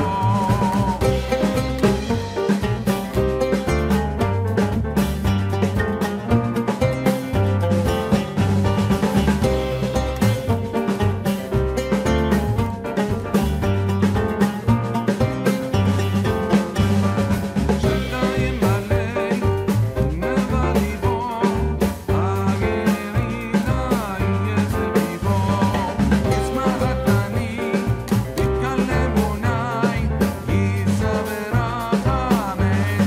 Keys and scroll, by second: 1.0 Return.